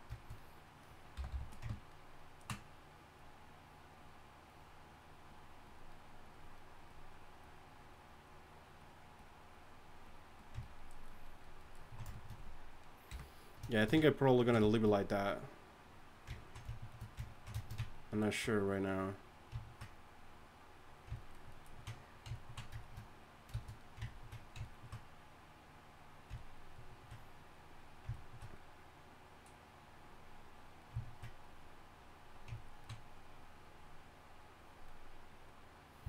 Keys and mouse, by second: 1.3 g, 1.5 f, 22.1-28.4 drag.